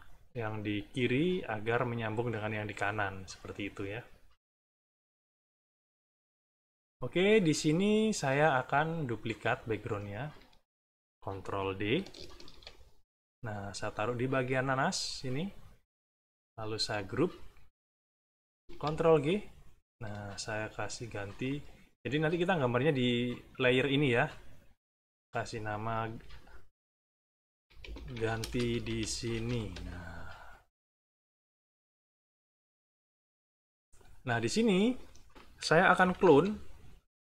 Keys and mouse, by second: 5.6-8.1 drag, 9.0 click, 9.4 click, 9.8 click, 12.3 ctrl+d, 13.7-15.2 drag, 16.4 shift+click, 16.9 shift+click, 18.6 ctrl+g, 20.8 click, 21.3 click, 23.3 click, 24.7 click, 25.5 click, 27.2-29.9 typing, 32.9 click, 34.2 middle click, 34.8 middle click, 35.9 -.